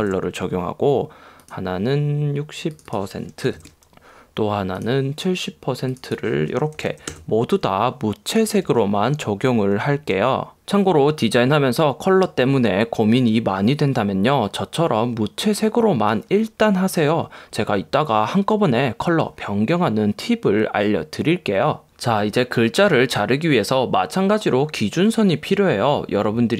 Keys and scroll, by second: 7.1 0.